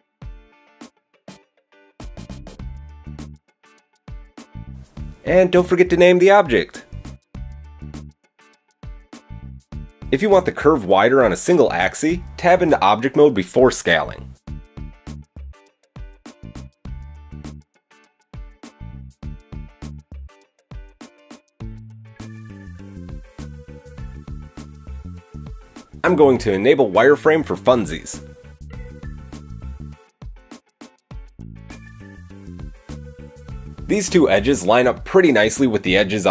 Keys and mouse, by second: 2.2 Tab, 5.3-18.0 drag, 10.5 KP_7, 12.5 s, 18.1-19.5 middle drag, 19.7-23.4 middle drag, 21.7 KP_1, 22.0 KP_3, 23.4 click, 23.5-25.7 middle drag, 25.8-27.0 middle drag, 27.0-28.2 middle drag, 28.7-36.3 middle drag.